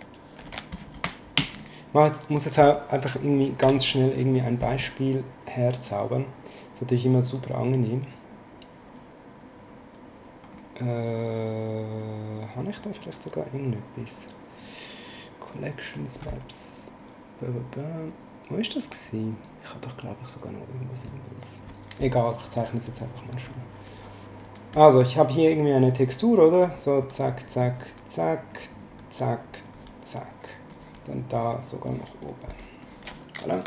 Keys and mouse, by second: 0.4 ctrl+shift+n, 3.6 b, 5.7 click, 7.2 click, 23.3 right click, 24.7 click, 25.8 click, 30.7 click.